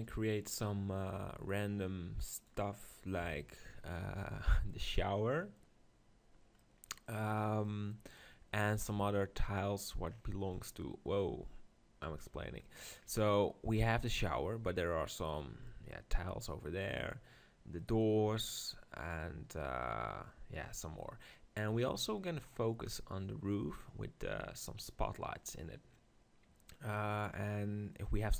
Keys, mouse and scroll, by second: 2.4-3.4 drag, 3.2 KP_7, 3.9 click, 4.0 middle click, 9.5-13.7 drag, 10.5-12.4 middle drag, 12.8-15.9 middle drag, 20.7-23.6 middle drag, 23.6-27.3 scroll up 1, 27.3-28.3 middle drag.